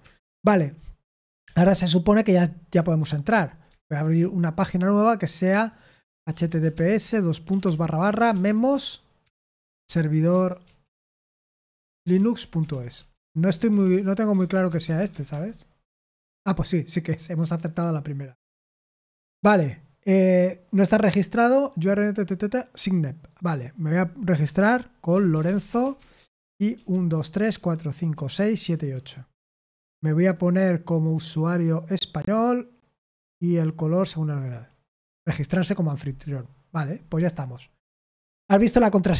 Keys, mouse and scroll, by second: 0.0-0.5 typing, 2.7 super+8, 7.6-15.6 typing, 26.0 Tab, 26.0 typing, 28.7 typing.